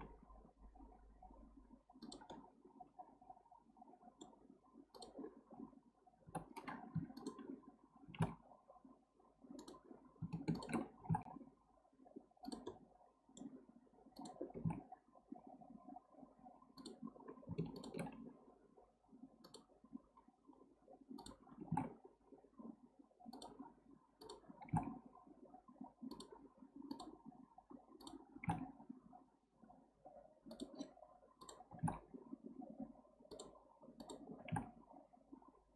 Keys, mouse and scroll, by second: 2.3-4.9 middle drag, 4.9 click, 6.3 o, 7.0 2, 7.2 drag, 8.1 g, 10.5 shift+click, 11.0 g, 12.7-14.2 middle drag, 14.2 click, 14.5 g, 17.7 shift+click, 19.4 click, 20.1-21.2 scroll up 1, 21.2 drag, 21.6 g, 24.2 click, 24.6 g, 26.9 click, 28.0 drag, 28.3 g, 31.4 click, 31.7 g, 34.0 click, 34.4 g.